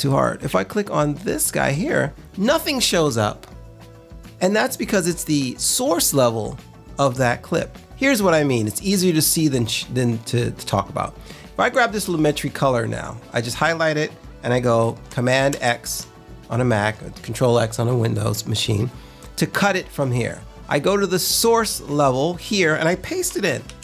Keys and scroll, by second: 15.4 super+x, 23.6 super+v.